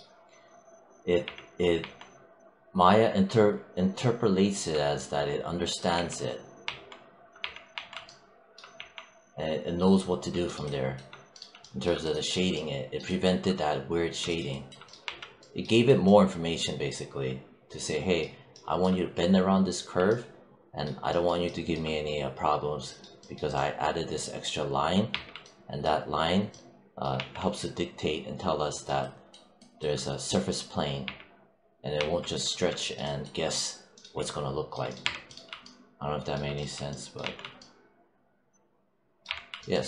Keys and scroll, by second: 1.1 3, 1.7 1, 5.8 3, 8.6 3, 14.9 1, 25.0 3, 27.0 1, 30.9 3, 34.9 3, 37.1 1, 39.1 3.